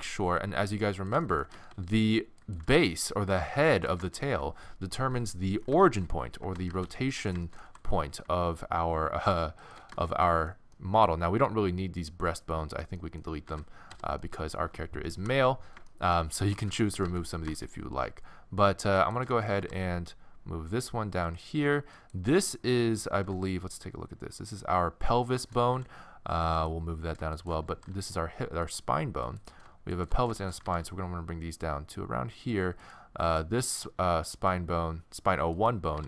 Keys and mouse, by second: 1.3-2.4 middle drag, 1.6 a, 1.7 a, 2.4 click, 2.6 g, 4.1 middle click, 4.3 middle click, 4.4 a, 4.6 a, 6.7 a, 6.9 c, 7.7 g, 13.5 x, 15.2 KP_1, 16.4 a, 16.6 a, 17.1 a, 19.6 g, 22.0-23.2 right drag, 23.2-25.8 middle drag, 23.2 n, 25.8 g, 27.4 click, 27.7 g, 30.6 g, 31.9 click, 35.9 g.